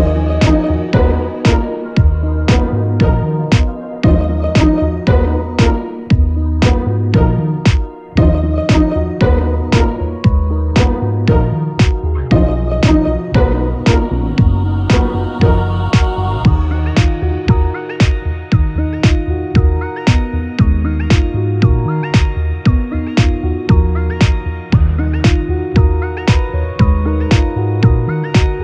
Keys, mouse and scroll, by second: 0.5 s, 2.3 e, 4.0 x, 6.6 click, 6.7-28.6 middle drag, 7.7 i, 9.2 e, 9.9 s, 11.5 e, 13.3 x, 13.9 Tab, 14.3 q, 15.9 Tab, 18.8 2, 19.0 click, 19.4 shift+click, 20.0 q, 21.7 shift+click, 22.6 q, 23.4 Tab, 24.2 q.